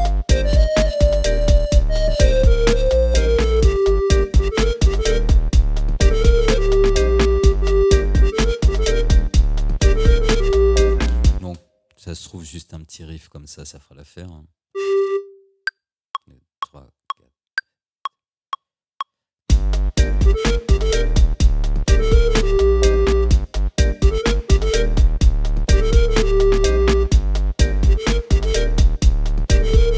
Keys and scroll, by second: 11.4 space.